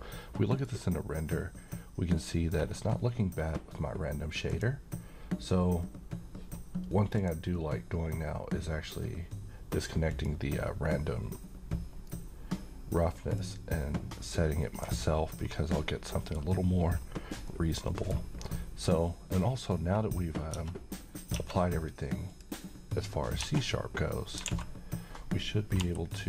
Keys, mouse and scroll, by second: 4.5 click, 7.2 click, 10.1 click, 13.4-14.9 drag, 15.4-15.9 scroll up 1, 15.9-16.5 middle click, 16.9-17.4 scroll down 1, 17.4-18.4 middle click, 19.8-20.3 scroll up 1, 20.5 Tab, 22.3 click, 23.4 Tab, 24.4 alt+a, 25.8 l.